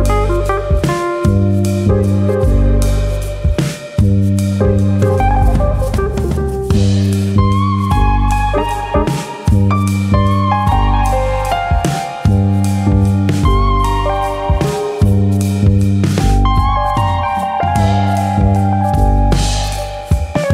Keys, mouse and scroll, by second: 1.1 middle click, 2.0 click, 2.2 middle click, 3.0 ctrl+KP_Add, 3.7 KP_1, 5.5 e, 6.4 right click, 6.6 ctrl+z, 7.4 s, 8.7 right click, 9.9 s, 11.5 click, 13.1 click, 14.8 e, 15.8 click, 16.1 s, 16.6 click, 17.2 alt+click, 17.6 s, 18.0 click, 18.6 alt+click, 19.1 click.